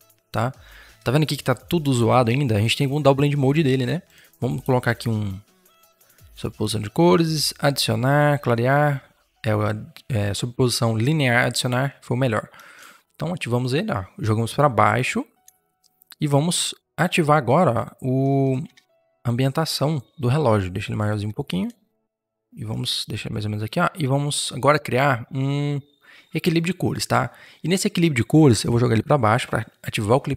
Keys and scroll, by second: 12.4 Return, 18.5 ctrl+t, 21.1 Return, 22.1 0, 22.2 ctrl+z.